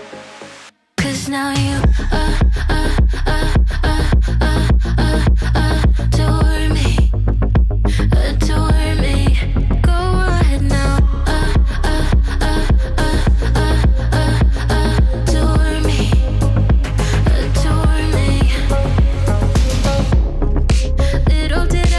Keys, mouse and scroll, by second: 0.7 ctrl+space, 3.4-6.4 typing, 6.6 Down, 6.8 Down, 7.0 Down, 7.2 Down, 7.3 Down, 7.9 Return, 10.4-12.8 drag, 11.1-11.8 typing, 13.2-14.2 typing, 14.6 Return, 15.9 click, 17.0-17.7 typing, 18.4 Return.